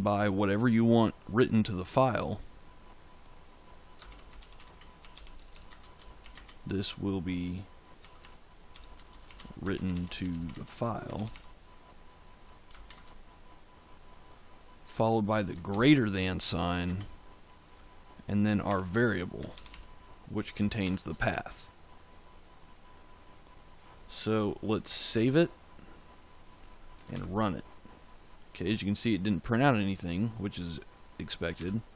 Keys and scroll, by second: 3.8-6.3 typing, 7.7-11.8 typing, 12.8 shift+1, 15.6 shift+., 16.8 space, 18.6-20.7 typing, 25.1 ctrl+s, 27.0 ctrl+shift+z, 31.5 f.